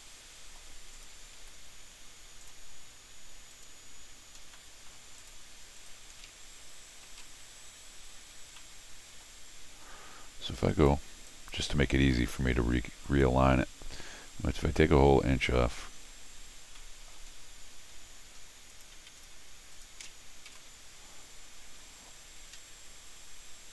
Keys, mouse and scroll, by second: 0.9 click, 1.4 c, 2.4 click, 3.5 click, 4.4 scroll down 4, 4.7 middle click, 5.2 click, 5.8 click, 7.1 alt+x, 8.4 middle click, 10.7 click, 11.3 click, 11.7 1, 13.0 click, 16.2-16.7 scroll down 2, 16.8 middle click, 17.6 scroll up 1, 18.3 middle click, 18.7 click, 19.2 click, 19.7 click, 20.5 alt+x.